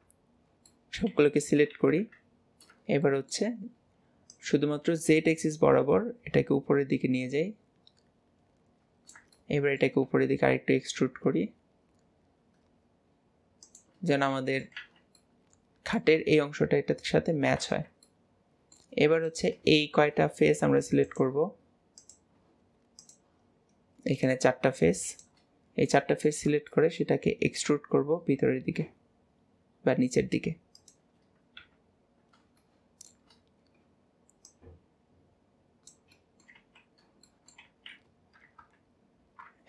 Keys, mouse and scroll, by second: 0.7 middle click, 1.2 a, 3.1-4.3 shift+middle drag, 4.3 click, 9.4 shift+middle click, 10.1 e, 14.1 middle click, 14.8 alt+z, 15.2-16.5 middle drag, 17.9-19.3 middle drag, 19.3 click, 21.1 click, 22.0 click, 23.0 shift+click, 24.1 shift+click, 25.1 shift+click, 25.6 scroll down 2, 25.9-28.2 middle drag, 28.2 e, 32.6 shift+middle click, 33.4-34.5 scroll up 2, 34.5 click, 36.1 middle click, 36.4 middle click, 36.7 alt+z, 36.9 scroll down 2, 37.3 shift+middle click, 37.7 alt+z, 38.6 KP_1.